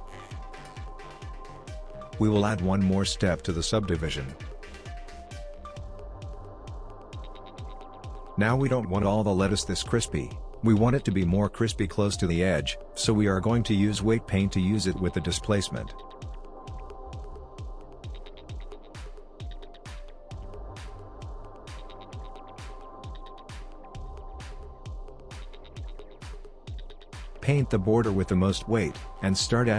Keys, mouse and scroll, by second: 0.8 middle click, 3.0 click, 4.7 click, 6.5 click, 7.1 middle click, 7.7 scroll up 2, 8.5 middle click, 9.1-9.7 scroll down 2, 9.7 middle click, 13.7 middle click, 16.8 middle click, 21.7 click, 26.0 middle click, 26.0-27.6 scroll down 2, 27.8 click.